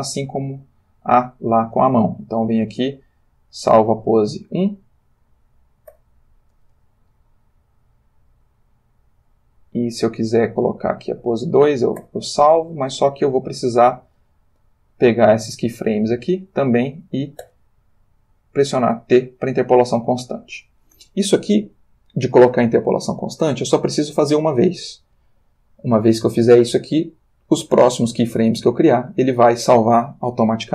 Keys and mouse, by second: 3.6 click, 6.0 i, 7.6-9.4 drag, 10.7 click, 12.3 i, 13.0-14.3 middle drag, 14.7-16.3 drag, 17.7 t, 19.0 click, 20.2 click.